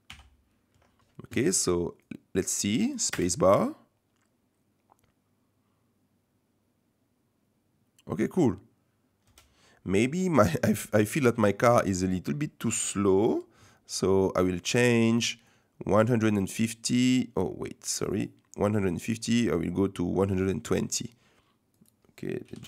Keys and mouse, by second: 0.1 i, 2.0 click, 3.1 space, 9.2 space, 10.3 click, 11.2 shift+click, 15.4-17.8 drag, 18.0 click, 18.8-20.7 drag, 21.8-22.6 drag.